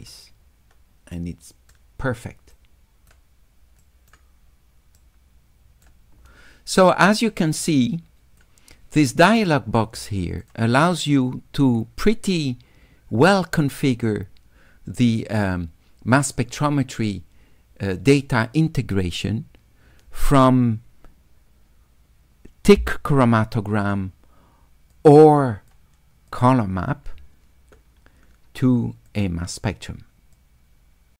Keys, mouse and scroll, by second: 1.2 right click, 2.6 right click, 3.8 right click, 5.0 right click, 7.8 click, 8.8 click, 10.4 click, 25.0 click, 29.0 click, 30.4 click.